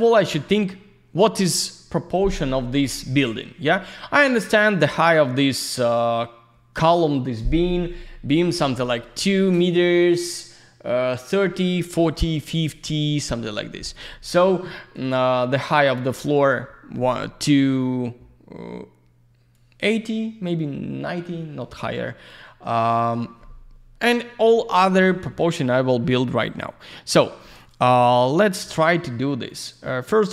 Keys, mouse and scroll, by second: 13.0 click, 19.5 click, 27.6 click, 29.7 click.